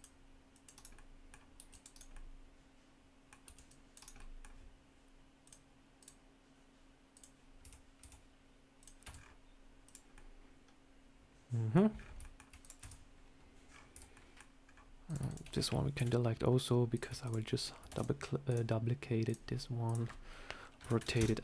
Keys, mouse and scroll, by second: 0.8 middle click, 1.5 c, 2.0 middle click, 3.3 c, 4.1 middle click, 5.3 click, 5.9 click, 7.5 Tab, 7.9 Tab, 8.7 click, 8.9 Tab, 9.0 scroll down 2, 9.7 click, 9.7 scroll down 2, 10.0 middle click, 11.8 scroll up 4, 12.1 shift+middle click, 12.5 click, 12.7 Tab, 13.6-14.0 scroll down 4, 13.8 Tab, 14.0 middle click, 14.5 scroll down 2, 15.0 click, 15.1 shift+click, 15.9 Delete, 16.0 middle click, 16.8 click, 17.1 shift+click, 17.8 shift+d, 18.4 click, 19.2 click, 19.4 shift+click, 19.7 click.